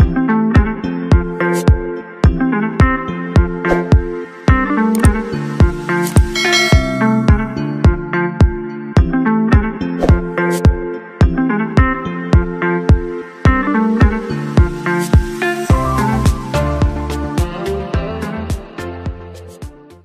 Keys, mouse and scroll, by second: 1.1 ctrl+t, 4.9 Return, 7.5 ctrl+-, 8.0 ctrl+=, 8.3 ctrl+=, 8.7 ctrl+-, 9.1 ctrl+=, 9.3 ctrl+=, 9.4 ctrl+=, 9.6 ctrl+=, 10.6 ctrl+-, 10.7 ctrl+-, 11.0 ctrl+-, 11.4 ctrl+-, 11.7 ctrl+-.